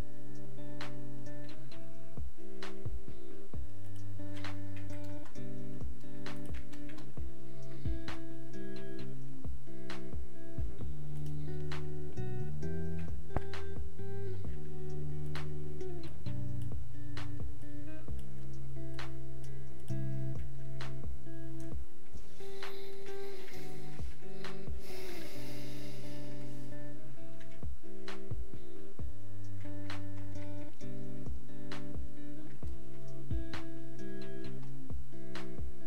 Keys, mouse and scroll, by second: 29.9 click.